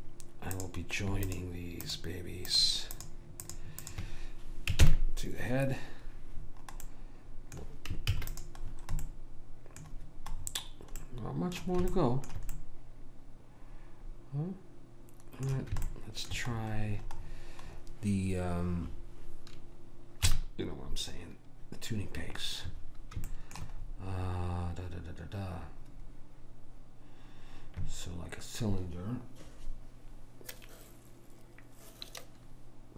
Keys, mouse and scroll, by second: 0.7-5.7 drag, 4.9 ctrl+j, 8.3 ctrl+s, 14.4 middle click, 16.0-20.4 middle drag, 20.4 KP_1, 23.4-26.8 middle drag.